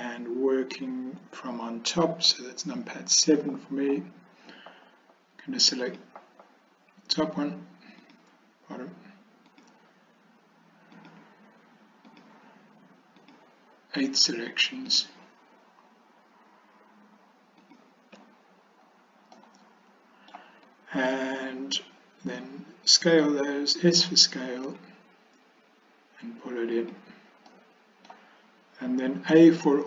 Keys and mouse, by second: 3.2 KP_7, 5.9 click, 11.0 shift+click, 13.3 shift+click, 15.0-17.5 shift+drag, 19.4-20.4 middle drag, 24.8 s, 27.6 middle click.